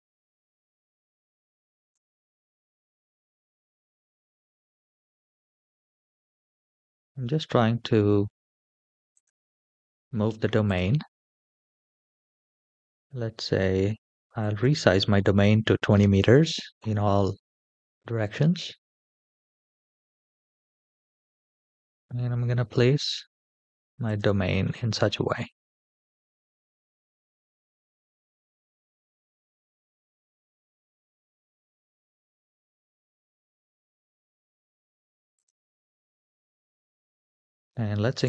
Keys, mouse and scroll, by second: 1.2 g, 3.3 scroll down 3, 3.5-4.1 middle drag, 4.9 KP_7, 8.9 click, 10.4-13.0 drag, 13.6-14.9 drag, 18.6 g, 24.4-25.9 middle drag, 26.6 KP_3, 27.7-28.9 middle drag, 29.5 shift+middle click, 30.0-32.2 middle drag, 35.1 click, 37.0 scroll down 3, 37.9-38.2 drag.